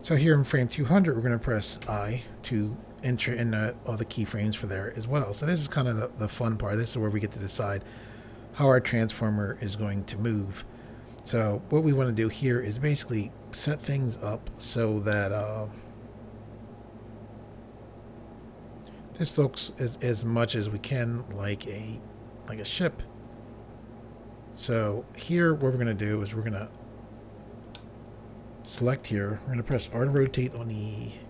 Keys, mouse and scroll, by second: 1.8 i, 15.1 middle click, 26.6 click, 27.8 middle click, 29.8-30.2 typing.